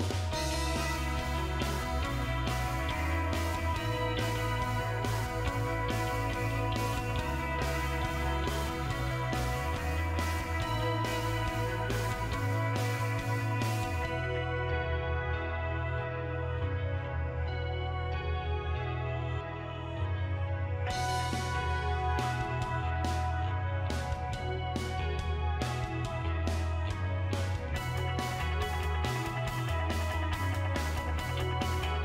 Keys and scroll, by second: 0.7 BackSpace, 1.8 BackSpace, 4.1 1, 5.4-7.2 typing, 8.5 BackSpace, 8.7 8, 12.8-13.5 typing.